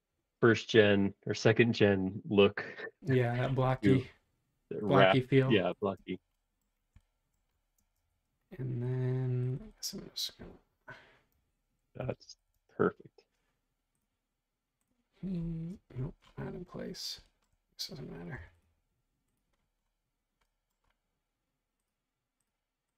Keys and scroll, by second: 5.9 space, 7.1 space, 7.8 space, 8.0 ⟲, 12.0 super+c, 12.4 ↻, 12.6 space, 18.3 m.